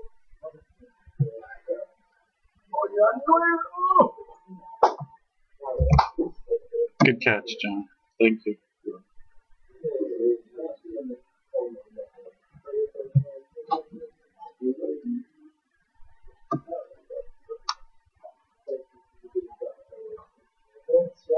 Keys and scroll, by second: 1.1 i, 5.8 ctrl+z, 6.9 space, 13.1 ▯, 16.4 space, 19.8 space.